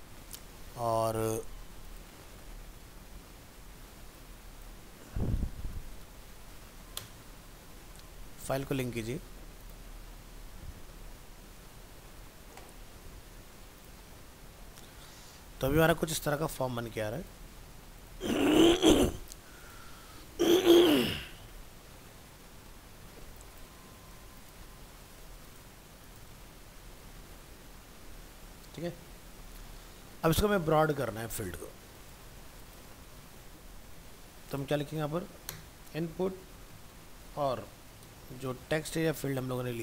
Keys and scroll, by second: 6.0 ctrl+space, 7.3 ctrl+s, 24.1 ctrl+c, 25.0 ctrl+v, 26.9 alt+Tab.